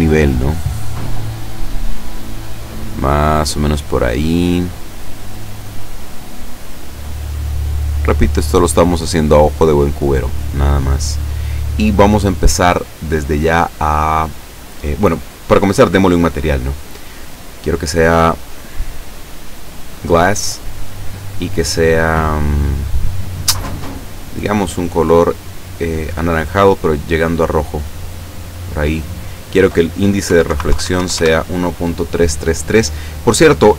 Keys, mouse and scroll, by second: 0.2 shift+scroll up 1, 0.9 click, 2.7 middle click, 3.9 middle click, 4.5 scroll down 1, 5.4 click, 7.8 click, 9.1-10.7 middle drag, 10.8-11.2 scroll down 1, 11.4 scroll down 1, 16.0 click, 16.9 click, 18.5 click, 20.0 click, 21.3 click, 24.5 click, 29.1 click, 30.2 KP_1, 30.5 KP_Decimal, 30.7 KP_3, 31.1 KP_Enter.